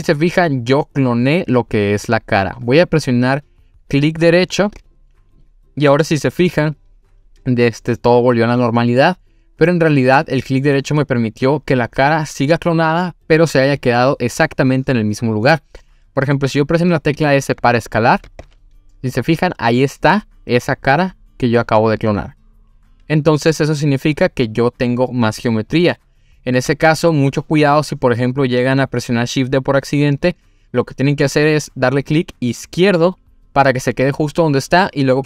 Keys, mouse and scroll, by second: 4.8-7.8 right drag, 18.4 s.